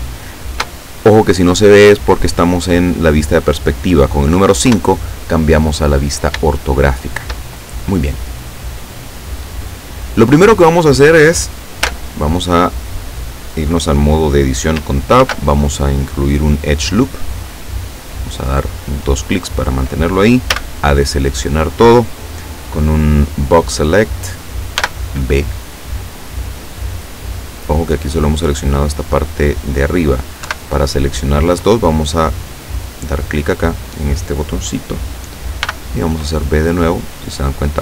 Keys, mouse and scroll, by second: 4.7 KP_5, 6.6 shift+middle click, 8.2-10.6 drag, 11.8 Tab, 15.3 ctrl+r, 17.4 click, 18.2 click, 20.6 a, 24.8 b, 25.6 click, 26.8-28.4 middle drag, 30.5 KP_7, 32.8 click, 35.7 b, 36.0 click, 36.9-37.8 middle drag.